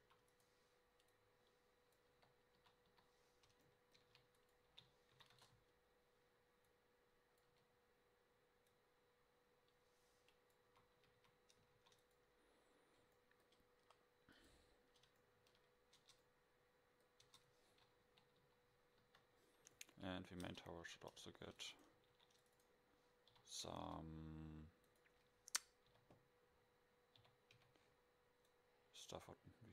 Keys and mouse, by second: 0.1 a, 0.4-1.1 drag, 2.1 KP_7, 2.9 KP_5, 4.0 shift+d, 4.7 r, 7.5 KP_0, 10.9 a, 11.1 a, 11.3 a, 11.8 ctrl+s, 16.3 Tab, 17.4 Tab, 18.1 KP_7, 18.5 KP_5, 19.1 KP_5, 20.2 middle click, 20.6 Tab, 20.9 a, 21.5 ctrl+r, 22.1 ctrl+r, 23.4 z, 24.1 a, 25.9 z, 27.2 z, 27.7 c.